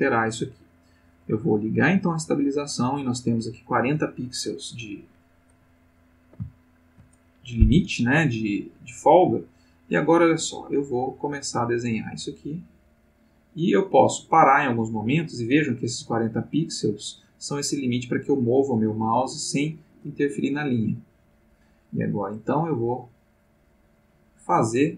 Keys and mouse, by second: 1.1 click, 5.7-7.1 ctrl+middle drag, 8.7-24.9 drag.